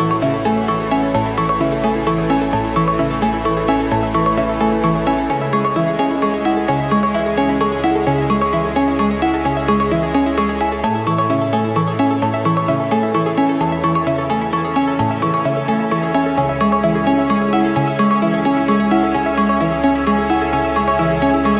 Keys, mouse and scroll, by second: 0.3-2.0 drag, 2.5 click, 3.6 scroll down 1, 4.1 scroll up 1, 5.0 ctrl+click, 5.7 ctrl+click, 6.9 click, 7.7-9.3 drag, 10.2 click, 11.0 click, 11.9 click, 13.1 click, 15.5 click, 15.9 click, 19.8-21.5 drag.